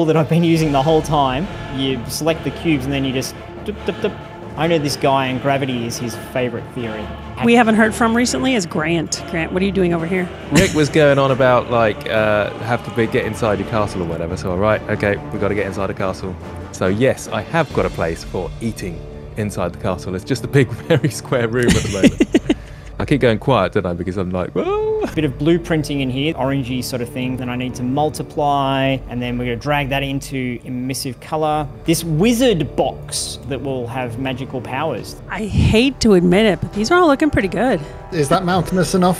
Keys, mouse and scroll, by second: 9.1 e, 9.2 Tab, 9.5 scroll down 4, 9.9-13.4 middle drag, 13.4 scroll up 1, 13.6 scroll down 3, 14.0-21.8 shift+middle drag, 21.8 scroll down 4, 22.2 middle click, 22.8 scroll down 1.